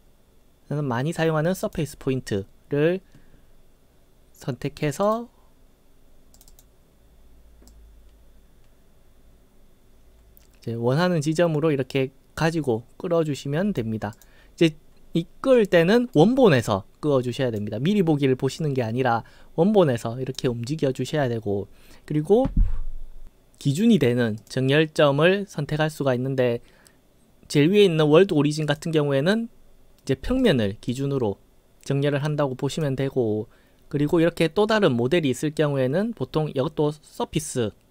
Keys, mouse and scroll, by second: 1.7 click, 5.0 click, 6.4 click, 6.5 click, 7.7-13.8 drag, 14.1 click, 15.5-16.1 right drag, 16.6-17.6 drag, 18.6-20.3 drag, 24.4 click, 28.7 click, 30.4 click, 30.9 click, 32.8 click.